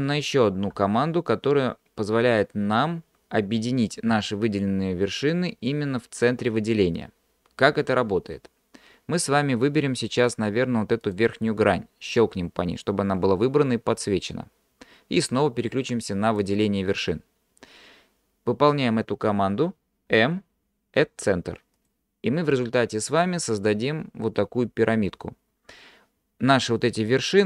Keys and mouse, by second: 0.8 m, 10.2 click, 11.1 click, 16.3 click, 20.1 m, 23.7-25.1 middle drag.